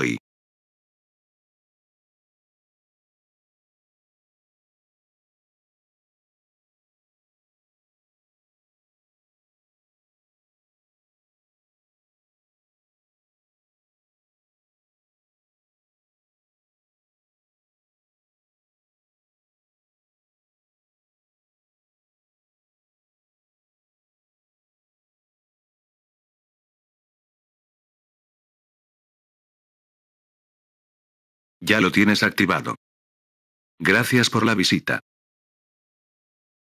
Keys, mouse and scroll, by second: 2.1 click, 12.7 click, 15.2 click, 18.4 click, 19.5 F7, 23.5 click, 27.1 click.